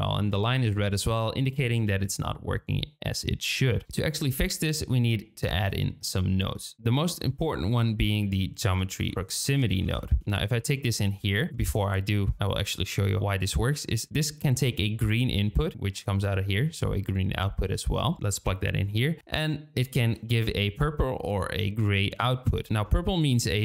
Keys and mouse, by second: 1.8 shift+click, 3.8 shift+a, 12.4 shift+middle click, 18.9 shift+middle click.